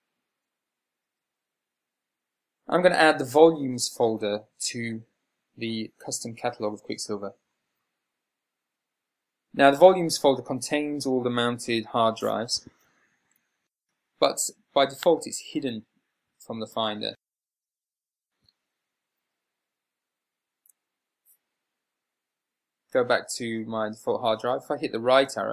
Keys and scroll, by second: 22.6 /.